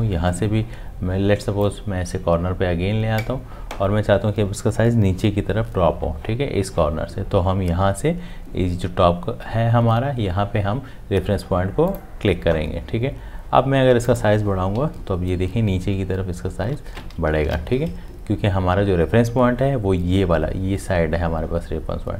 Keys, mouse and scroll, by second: 14.8 Up.